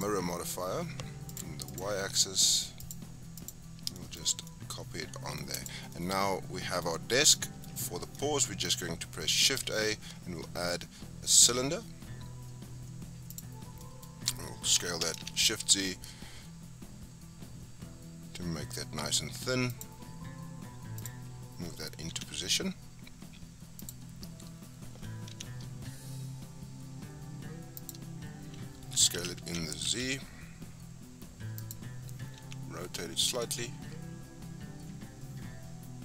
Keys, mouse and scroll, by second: 0.0-1.4 drag, 1.7 click, 2.8 click, 3.9 shift+scroll down 1, 3.9-5.5 shift+middle drag, 5.5 click, 5.8 scroll down 5, 5.9-6.9 middle drag, 6.9-7.3 scroll up 4, 7.3-7.7 shift+middle drag, 7.7-8.1 scroll down 3, 8.1-8.8 middle drag, 8.8 scroll down 5, 9.0-9.6 middle drag, 9.6 shift+a, 13.6 scroll down 4, 13.8-14.7 middle drag, 14.7 s, 20.1-21.0 scroll up 5, 21.0 click, 22.1 g, 23.8 click, 24.3-25.3 scroll up 6, 25.3 g, 28.3-29.1 scroll down 7, 29.1 s, 32.4 r.